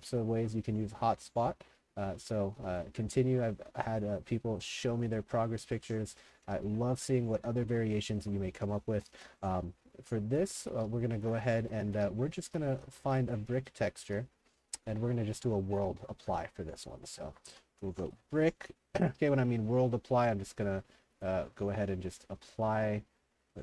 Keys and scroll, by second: 0.0 s, 5.4-13.4 typing, 17.2-18.6 typing.